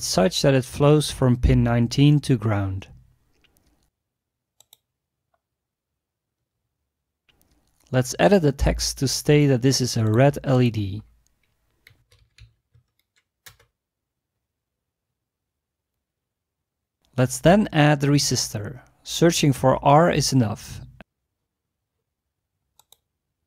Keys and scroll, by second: 0.0-0.2 typing, 8.8 e, 11.8-13.7 typing, 13.5 Return, 18.6 typing, 20.0 typing.